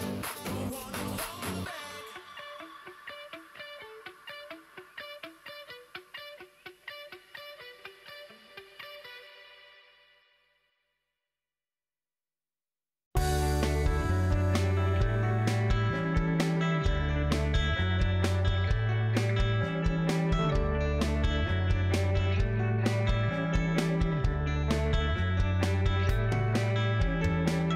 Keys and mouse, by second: 2.5 ctrl+r, 5.4 click, 6.0 g, 8.4 shift+middle click, 9.5 alt+click, 15.1 KP_Decimal, 16.0 shift+click, 17.4 click, 17.7 alt+z, 18.9 g, 20.7 alt+click, 21.3 ctrl+click, 22.1 g, 23.9 ctrl+click, 24.4 g, 26.3 ctrl+click, 27.0 KP_Decimal.